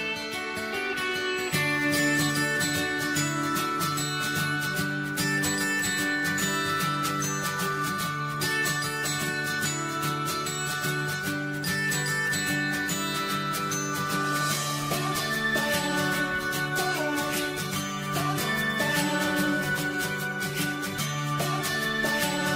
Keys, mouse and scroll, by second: 20.4 click, 20.9 click.